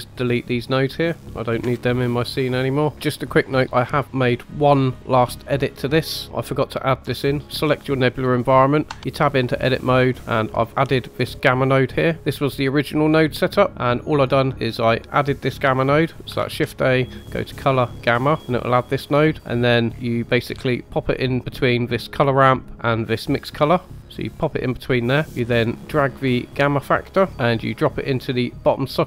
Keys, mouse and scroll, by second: 0.0-0.8 drag, 1.8 Delete, 2.5 middle click, 2.9 click, 3.6 middle click, 7.4 click, 7.6 click, 8.8 Tab, 9.3-10.0 middle drag, 10.1 scroll down 2, 10.2 middle click, 11.0 click, 12.1-13.0 scroll down 1, 12.1 KP_0, 13.7 middle click, 14.0 middle click, 14.9 click, 16.1 click, 16.3 shift+a, 19.3 click, 19.9-20.4 scroll down 3, 20.4-21.4 scroll down 1, 21.4 scroll up 3, 22.3 middle click, 23.8-25.0 drag, 25.2 middle click, 26.2-26.8 scroll down 1, 26.8 middle click, 26.8 scroll down 1, 27.3-29.0 drag.